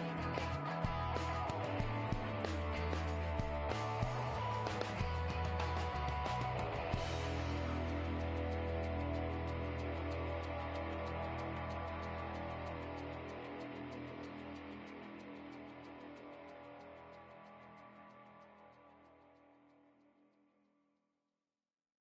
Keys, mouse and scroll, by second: 0.5-4.5 right drag, 1.3 g, 2.9 g, 4.0-9.0 middle drag, 12.0-15.5 drag, 14.8-16.7 middle drag, 16.7-18.5 drag, 17.9-19.7 middle drag, 20.6-22.0 drag.